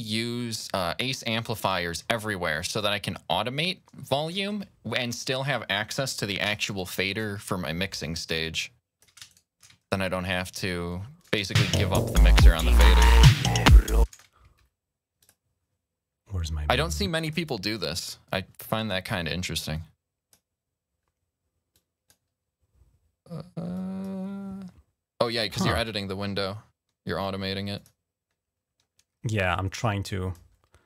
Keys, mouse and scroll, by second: 1.6 ctrl+scroll up 2, 2.6-3.9 drag, 4.1 ctrl+z, 4.9 click, 5.4 click, 6.1-9.3 drag, 6.3 s, 9.1 shift+right click, 9.6 ctrl+scroll down 1, 10.2 ctrl+scroll up 1, 11.0 click, 11.2 space, 12.8-13.1 ctrl+scroll down 1, 13.1-13.4 ctrl+scroll up 1, 13.9-14.4 typing, 15.0 click, 16.3-17.0 typing, 16.7 click, 19.5 click, 21.5 click, 23.5 click, 25.0 click, 27.5 click, 29.8 click, 30.3 scroll down 1.